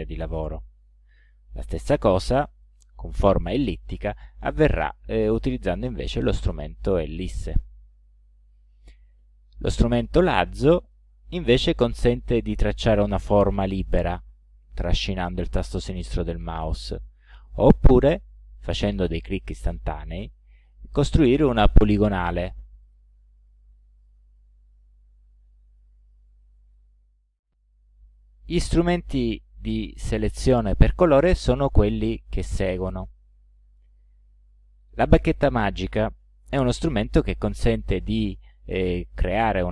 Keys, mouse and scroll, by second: 2.6 click, 4.4-6.5 drag, 10.8 click, 12.6-16.2 drag, 18.3 click, 18.9 click, 19.5 click, 20.1 click, 20.6 click, 21.2 click, 21.7 click, 22.3 click, 22.8 click, 24.0 click, 35.2 click, 37.2 click.